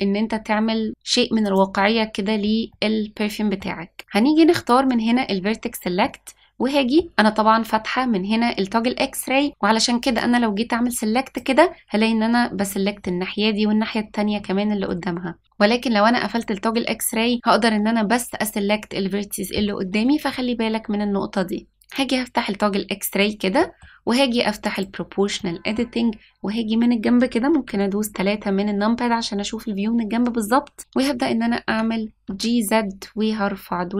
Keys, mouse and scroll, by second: 1.4 click, 2.6 middle click, 6.0 middle click, 10.1-11.3 drag, 12.5 middle click, 14.3 middle click, 16.3 click, 21.8 click, 23.5 middle click, 24.7 click, 25.3 middle click, 27.5 KP_3, 31.6 g.